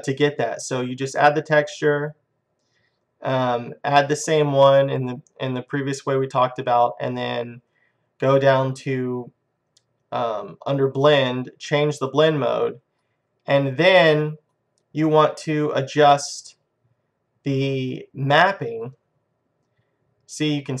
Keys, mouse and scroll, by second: 19.6-20.8 middle drag.